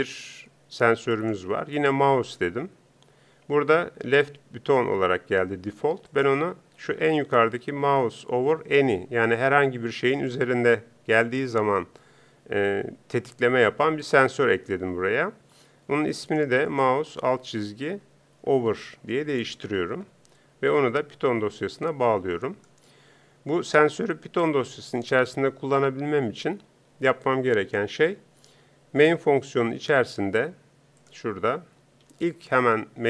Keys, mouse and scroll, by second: 20.7-21.9 drag.